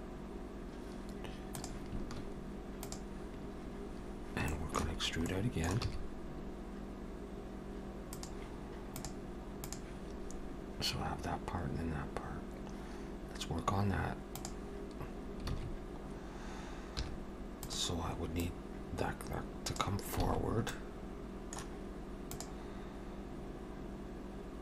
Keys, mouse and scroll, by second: 4.5 shift+middle click, 5.1 scroll up 1, 5.3 middle click, 5.9 e, 15.5 alt+a, 17.1 2, 17.7 click, 18.4 click, 20.3 alt+a, 20.7 middle click.